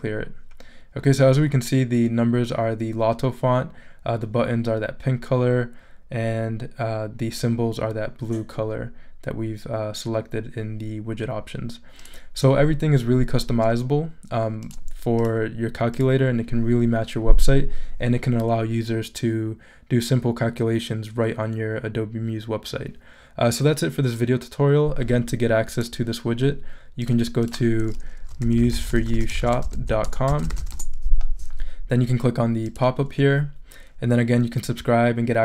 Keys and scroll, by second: 28.0-31.1 typing.